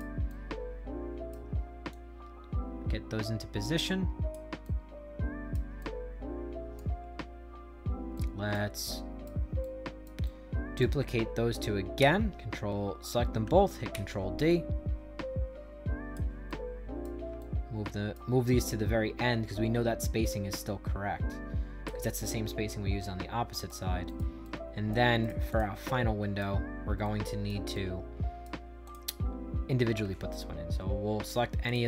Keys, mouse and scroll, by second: 0.2-1.2 shift+right drag, 1.8-4.2 drag, 4.5 right click, 5.7 shift+right click, 6.9 scroll up 2, 7.6-8.1 scroll down 2, 8.1 right click, 8.7 shift+right click, 9.5 right click, 10.1 shift+right click, 11.9 ctrl+d, 13.8 ctrl+d, 14.4-16.0 drag, 16.4 right click, 17.3 shift+right click, 18.5-21.8 drag, 22.0-23.6 right drag, 24.0 right click, 24.3 shift+right click, 25.1 right click, 25.4 click, 25.8 shift+right click, 26.9 right click, 27.6 shift+right click, 28.8 click, 31.6 click.